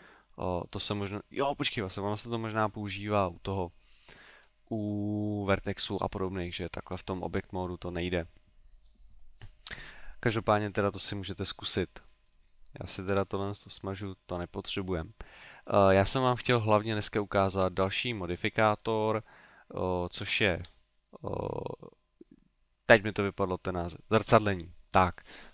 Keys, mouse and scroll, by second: 0.2 middle click, 11.7 middle click, 12.3 right click, 13.1 x, 13.9-14.2 scroll down 4, 14.7 middle click, 16.3 middle click, 18.3-18.8 scroll up 2, 19.5 middle click, 19.5-20.3 scroll up 1, 20.6 KP_3.